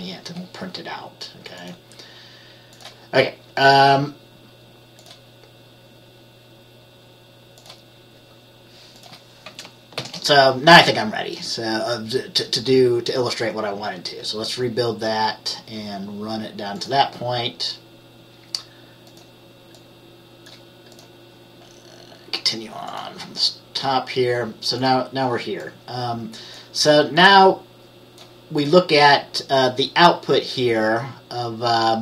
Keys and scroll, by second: 10.1 ctrl+b.